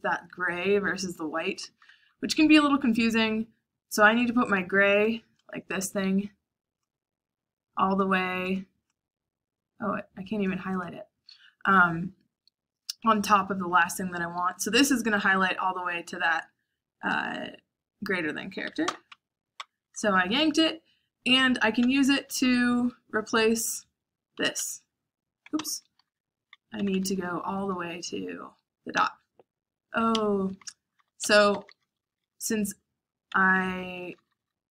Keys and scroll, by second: 1.4-2.3 typing, 19.0-20.0 typing, 21.5-22.8 typing, 24.1-27.8 typing, 28.9 p, 30.1 Escape, 30.7-34.7 typing.